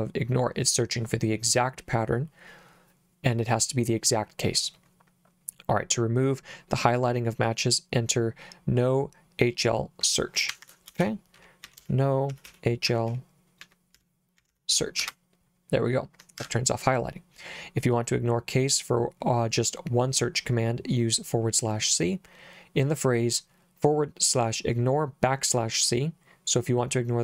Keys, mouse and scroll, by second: 10.5 Escape, 11.0-15.0 typing, 15.0 Return, 16.4 Escape.